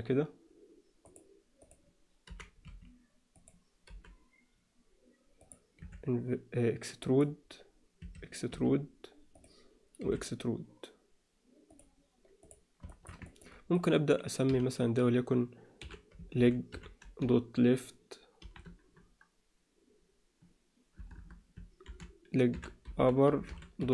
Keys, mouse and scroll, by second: 1.6 click, 2.2 g, 3.9 g, 5.8 e, 8.0 e, 10.0 e, 12.4 click, 12.9 shift+middle click, 13.2 ctrl+alt+middle click, 13.7 click, 14.5 F2, 21.1 BackSpace, 22.9 p.